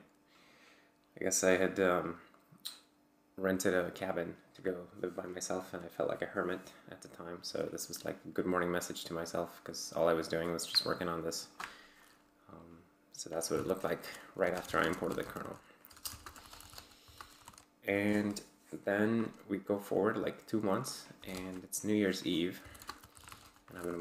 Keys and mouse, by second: 11.3 click, 13.5 ctrl+c, 14.1-17.8 typing, 18.1 Return, 20.9-24.0 typing.